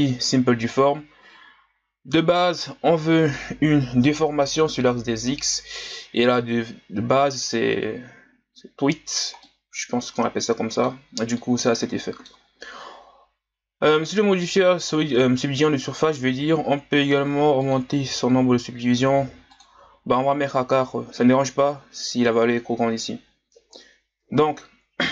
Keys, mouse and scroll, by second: 7.1-14.4 middle drag, 17.6-22.5 drag.